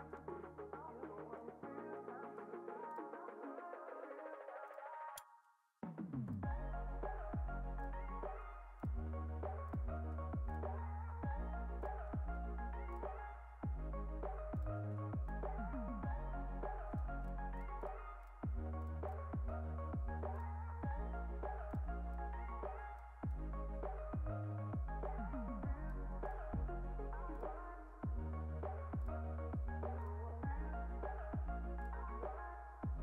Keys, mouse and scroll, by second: 0.0 ctrl+r, 5.6 ctrl+r, 8.3 ctrl+r, 10.0 ctrl+r, 12.2 ctrl+r, 15.2 click, 16.4 click, 17.5 click, 17.7 click, 18.1 click, 19.6 ctrl+r, 22.0 click, 22.5 click, 23.2 click, 25.7 click, 26.2 click, 26.7 ctrl+r, 29.6 ctrl+r.